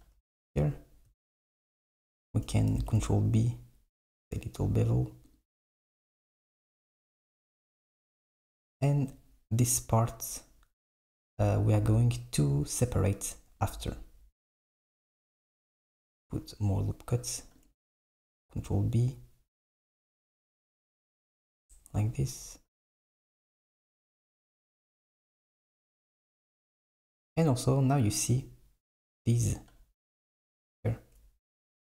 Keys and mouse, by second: 1.4 alt+b, 2.8 ctrl+b, 13.7 click, 15.8 r, 18.1 ctrl+b, 24.9 r, 29.3 click, 31.6 x.